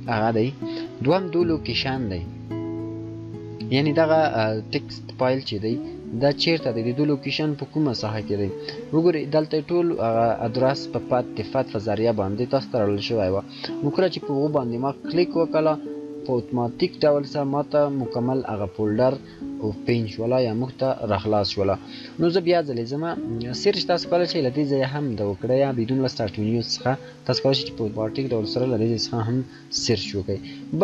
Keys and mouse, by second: 4.7 shift+click, 21.6 shift+click, 30.3 click.